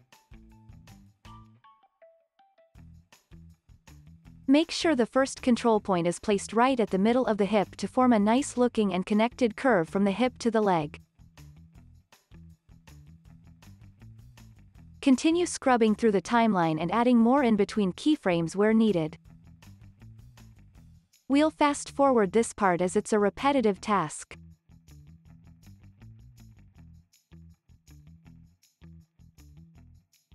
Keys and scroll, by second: 12.9 z, 14.3 x, 19.5 x, 20.3 z.